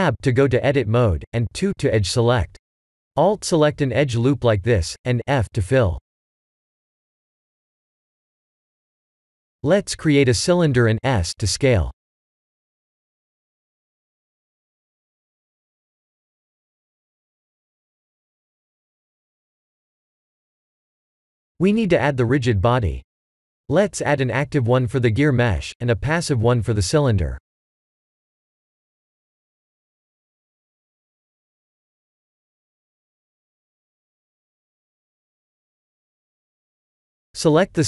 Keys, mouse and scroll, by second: 0.3 Tab, 1.1 2, 2.3 alt+click, 5.0 f, 5.5 middle click, 7.2 alt+click, 7.8 f, 8.2 middle click, 8.3 middle click, 8.8 middle click, 8.9 Tab, 10.1 shift+a, 14.6 s, 16.2 middle click, 17.6 middle click, 18.4-19.4 scroll up 2, 19.4 click, 21.7 click, 22.5 click, 26.3 click, 27.5 click, 29.1 click, 31.2 click, 32.6 click, 33.3 click, 35.4 click.